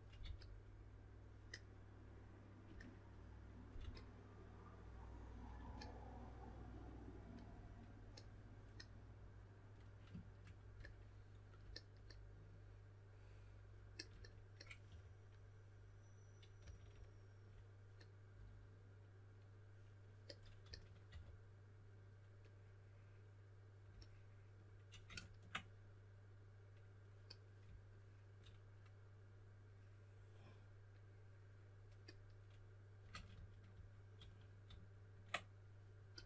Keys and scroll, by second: 0.2 4, 3.7 typing, 5.5 typing, 14.8 4, 16.3-17.0 typing, 20.6-21.0 typing, 33.0 super+z, 33.2 super+z, 33.7 super+z.